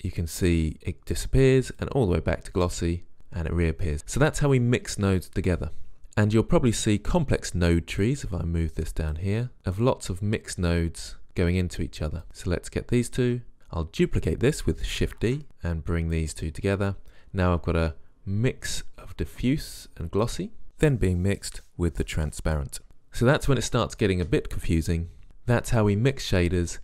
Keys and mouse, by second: 3.6-7.8 middle drag, 15.4 shift+d, 17.3-18.7 middle drag.